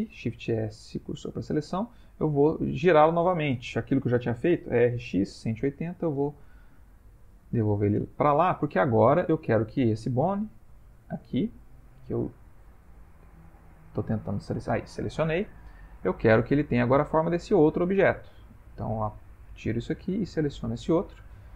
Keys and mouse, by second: 0.1 shift+s, 2.8 a, 4.5 r, 7.1 middle click, 8.0 Tab, 8.6 middle click, 9.8 click, 10.7 click, 11.4 click, 12.0 ctrl+middle click, 13.0 click, 13.6 click, 14.0 click, 15.0 middle click, 15.1 middle click, 15.6 ctrl+middle click, 16.0 ctrl+middle click, 16.5 shift+middle click, 16.9 shift+middle click, 17.8 click, 18.9 click, 19.7 click.